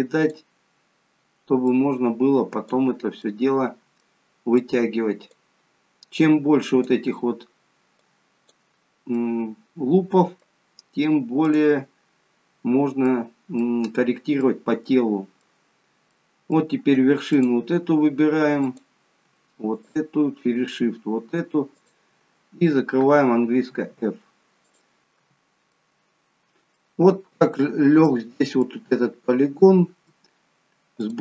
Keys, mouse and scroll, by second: 1.7 click, 3.2 middle click, 4.5 click, 6.2 click, 9.4 middle click, 11.4 click, 12.6 scroll down 1, 12.9 middle click, 14.4 middle click, 15.7-16.1 scroll up 2, 16.1 middle click, 17.3 click, 18.6 click, 19.7 shift+click, 20.5 shift+click, 23.5 shift+click, 23.5 f, 24.6 click, 25.2 f, 25.7 middle click, 28.0 middle click, 29.3 middle click, 31.1 click.